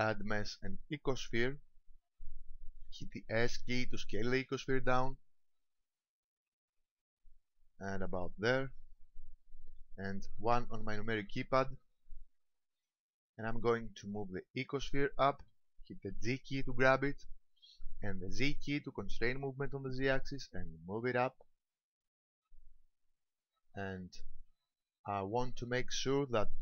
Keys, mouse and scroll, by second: 4.4 s, 8.6 ctrl+click, 10.5 KP_1, 12.3 shift+middle click, 12.9-13.9 scroll up 3, 13.9 shift+middle click, 16.2 g, 24.3 ctrl+click, 25.1 shift+middle click, 25.6-26.5 scroll up 4, 26.5 shift+middle click.